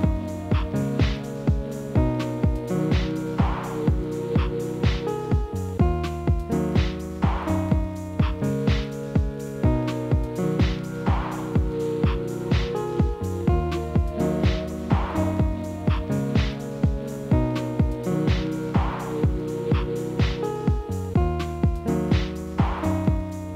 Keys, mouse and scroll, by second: 0.0 click, 0.6-0.9 drag, 0.9 scroll down 1, 0.9-1.3 middle drag, 1.3 click, 1.5 scroll down 1, 1.7-2.5 middle drag, 2.5 KP_Divide, 3.3 KP_7, 4.1-4.8 middle drag, 4.8 click, 5.6 click, 6.2 KP_7, 6.9 shift+z, 7.6 g, 8.4 KP_1, 9.7 scroll up 2, 9.9 middle click, 10.8 shift+z, 11.2 click, 11.5-11.9 scroll up 2, 11.9-14.5 shift+middle drag, 14.5-14.8 scroll up 2, 16.6 click, 17.1 click, 17.6 shift+right click, 18.0 KP_1, 18.5 scroll down 1, 18.6 shift+middle click, 18.8 s, 19.7 g, 21.5 middle click, 22.1 KP_Divide, 22.6 KP_7, 23.2 s.